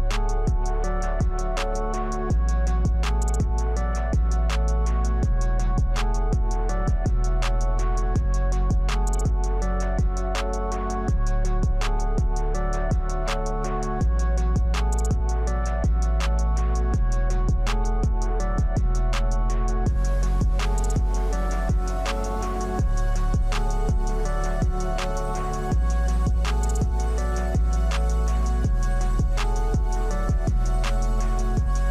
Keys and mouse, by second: 30.0-31.7 drag.